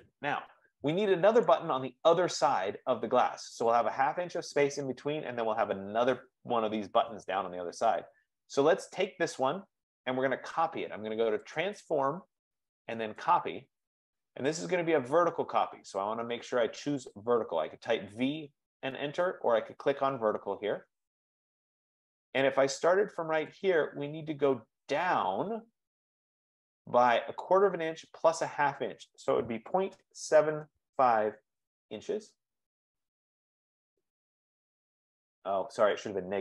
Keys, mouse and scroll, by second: 0.4-1.0 scroll, 1.6 click, 2.6 F15, 3.4 scroll down 6, 8.5 click, 9.1 click, 11.8 click, 13.7 click, 16.9-18.6 drag, 20.5-22.2 drag, 23.8 click, 28.2 click, 30.0 scroll down 1, 30.5-31.6 typing, 33.0 ", 33.5 Return.